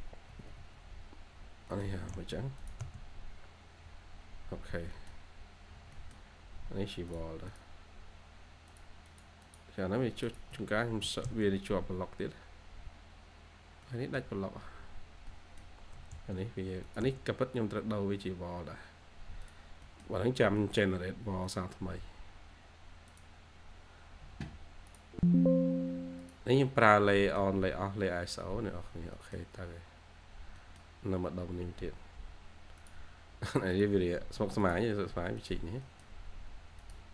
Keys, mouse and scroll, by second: 0.2 Escape, 0.5 Escape, 0.5-1.5 scroll up 1, 1.6 middle click, 1.8 typing, 3.0-3.3 scroll down 1, 3.3 1, 3.5-3.9 scroll up 1, 3.9 1, 4.1 scroll, 4.1-4.4 scroll up 1, 4.4 1, 4.6-4.9 scroll down 1, 4.9 middle click, 5.4-5.7 scroll up 1, 5.7 scroll down 1, 5.9 middle click, 6.5-7.4 scroll up 1, 7.4 double click, 9.0 double click, 9.7 scroll down 1, 9.8-10.4 scroll up 1, 10.4 Escape, 10.9 2, 12.4-12.7 scroll up 1, 12.7 2, 13.4-13.7 scroll down 1, 13.7 2, 15.2 middle click, 15.3-15.9 scroll up 1, 15.9 1, 16.2 scroll up 1, 16.5 1, 17.2 scroll down 1, 17.5 1, 18.2 scroll up 1, 18.5 1, 19.7 middle click, 26.7-27.1 scroll down 1, 27.1 middle click, 27.4-27.8 scroll down 1, 27.8-28.2 scroll up 1, 28.8 scroll down 1, 29.1 middle click, 30.2-30.5 scroll up 1, 30.5 middle click, 31.1-32.2 scroll up 1, 34.1-35.2 scroll up 1, 35.7 middle click.